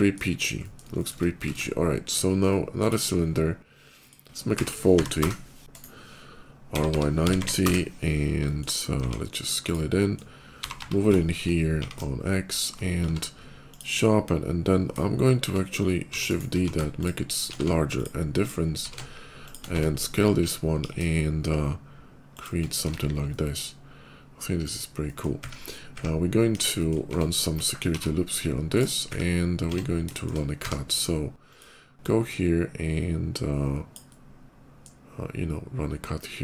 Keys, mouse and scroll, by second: 0.2 scroll up 1, 0.3 middle click, 0.8 shift+middle click, 1.2 shift+middle click, 1.3 shift+a, 2.5 click, 3.7 click, 4.8-7.2 typing, 5.0 Return, 5.6 middle click, 5.6 right click, 7.5 Return, 8.2 middle click, 8.8 s, 9.5 click, 9.8 middle click, 10.3 g, 10.5 y, 11.4 x, 12.4 click, 12.9 q, 13.5 click, 15.8 shift+d, 16.1 click, 16.4 s, 16.8 shift+click, 17.2 shift+click, 17.3 q, 17.8 click, 18.3 click, 18.6 s, 19.3 click, 19.5 Tab, 19.7 click, 20.6 ctrl+b, 22.2 click, 22.6 Tab, 22.8 middle click, 23.1-24.5 middle drag, 24.8 middle click, 26.3 KP_5, 26.4 middle click, 26.8 Tab, 27.7 ctrl+r, 28.6 click, 29.4 Tab, 29.7 middle click, 30.0 middle click, 30.1 shift+Tab, 30.4 d, 31.3 click, 31.7-33.8 drag, 33.9 middle click.